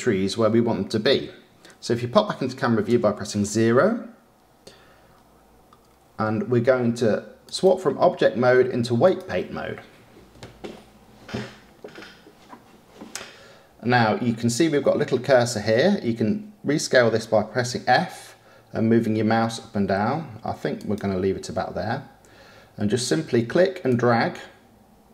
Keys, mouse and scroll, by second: 3.0 KP_0, 5.1-6.9 scroll up 2, 11.9 click, 17.6 f, 24.5-25.1 drag.